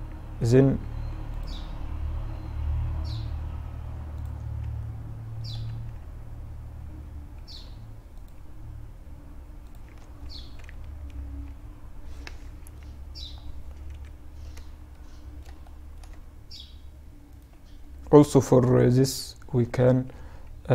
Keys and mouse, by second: 0.2 ctrl+r, 3.6 Tab, 4.1-6.6 middle drag, 4.7 Tab, 6.6 ctrl+r, 9.2 Tab, 10.0 KP_Subtract, 12.0-12.8 middle drag, 13.2 KP_Divide, 16.7-18.9 right drag, 18.3 KP_Divide, 18.9 Tab, 19.4 Tab, 20.2 Tab.